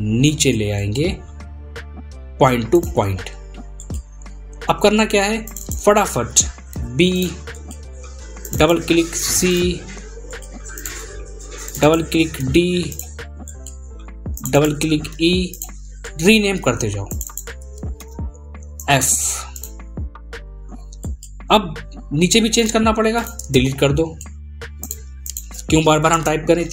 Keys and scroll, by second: 4.8 ctrl+a, 10.7 ctrl+a.